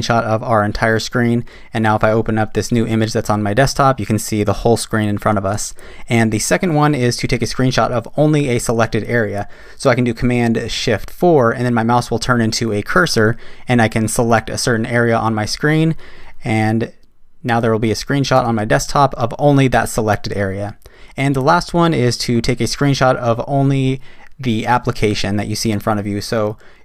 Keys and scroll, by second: 11.1 shift+super+4.